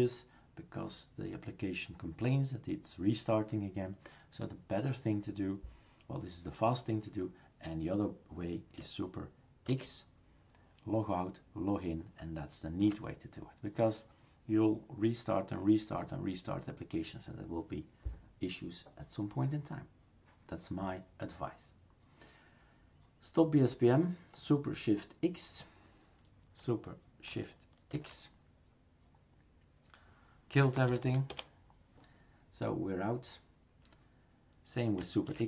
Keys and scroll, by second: 9.7 super+x, 27.9 shift+super+x, 35.3 super+x.